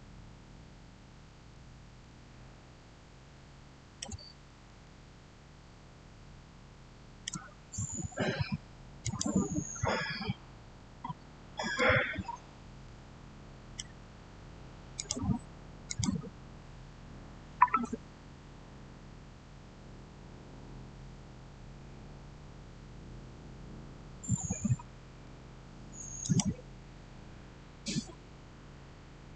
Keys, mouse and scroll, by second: 0.0-1.4 scroll down 1, 1.9-8.9 shift+middle drag, 8.9 click, 10.9 scroll up 1, 12.4 scroll down 1, 12.7-14.8 shift+middle drag, 14.8 click, 26.1 click, 26.8-28.3 scroll down 1.